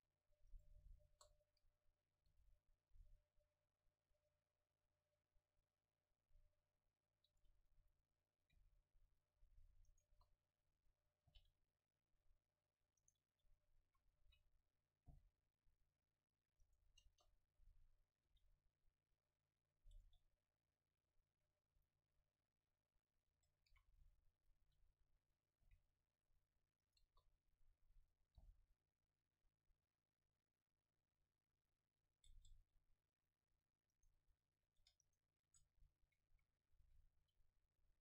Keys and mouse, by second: 0.7-2.2 drag, 1.1 KP_0, 2.3 g, 7.5-9.6 drag, 7.7 a, 8.6 c, 10.0 click, 10.1 KP_0, 11.3 g, 13.2 right click, 13.4 click, 13.9 a, 14.3 v, 15.1 c, 16.8-18.6 drag, 17.1 KP_0, 18.3 g, 20.1 Tab, 20.1-21.5 drag, 21.4 a, 23.3 Tab, 23.7 a, 24.0 v, 24.6 v, 25.7 c, 27.1 KP_0, 28.4 click, 28.4 g, 32.4 Tab, 32.4-34.3 drag, 34.0-35.5 right drag, 34.3 Tab, 34.9 Tab, 35.5 Tab, 36.3 a, 36.9 c.